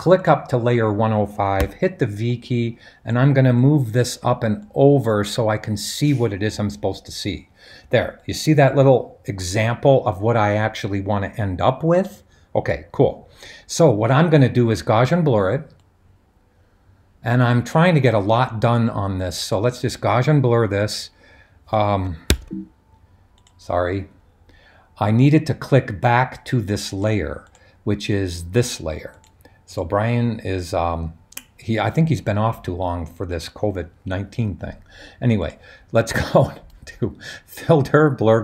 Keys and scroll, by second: 1.6 v, 22.2 super+z.